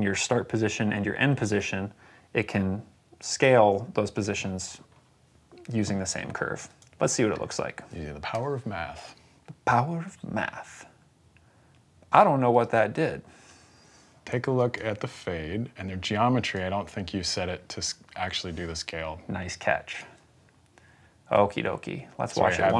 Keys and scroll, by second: 8.2 v.